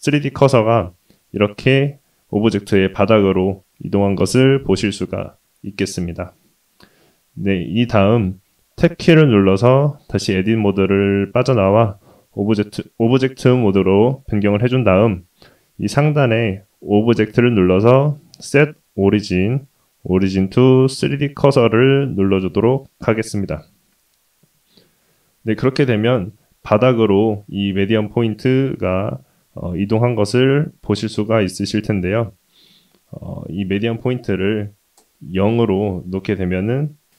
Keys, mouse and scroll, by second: 0.7-2.2 scroll up 2, 9.1 Tab, 16.5-21.2 drag, 25.7 shift+middle click, 27.3-29.4 scroll up 2, 29.4-30.2 scroll down 1, 30.2 scroll down 1, 33.2-35.0 drag, 35.4-36.0 scroll down 1, 36.0 middle click, 36.7-37.1 scroll up 2.